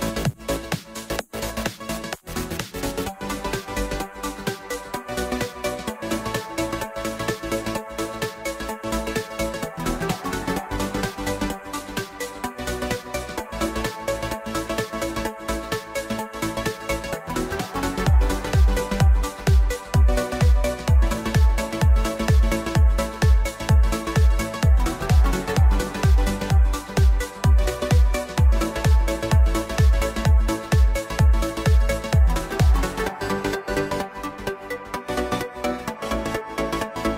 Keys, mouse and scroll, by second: 0.6 KP_0, 0.8 KP_0, 2.0 z, 2.7-4.3 middle drag, 4.3 click, 5.4 s, 8.5-9.8 drag, 9.8 KP_0, 10.0 KP_0, 12.0 KP_0, 13.9 click, 14.7 KP_0, 14.9 KP_0, 18.0 KP_1, 18.6 scroll down 2, 19.0-19.9 middle drag, 19.9 shift+click, 20.7 shift+click, 21.8 m, 26.0 Return, 28.5-30.6 drag, 31.4 click, 33.0-34.4 drag, 34.4 z, 34.9-35.4 scroll up 10, 35.8 click, 36.7 KP_1.